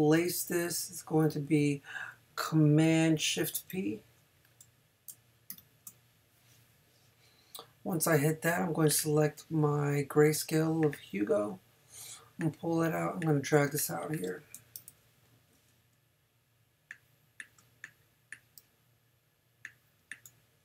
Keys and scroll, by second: 5.5 shift+super+p, 13.7 space, 14.5 super+space, 14.8 super+-, 15.9 shift+super+-.